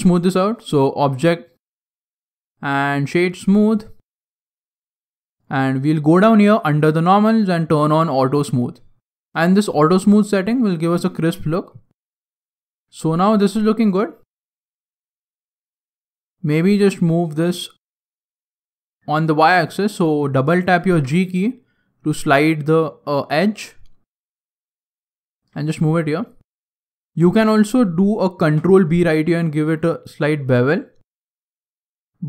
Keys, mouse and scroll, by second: 1.0 click, 4.6 middle click, 5.3 click, 6.5 click, 9.0 middle click, 9.2-10.6 scroll up 4, 10.6-10.9 scroll down 4, 10.9 middle click, 11.6 middle click, 12.2 scroll up 3, 12.6 middle click, 13.2 Tab, 13.5 middle click, 14.7 alt+right click, 15.2-15.8 scroll down 1, 20.6 g, 25.5 click, 25.8-26.4 scroll up 2, 26.7 alt+right click, 28.4 ctrl+b.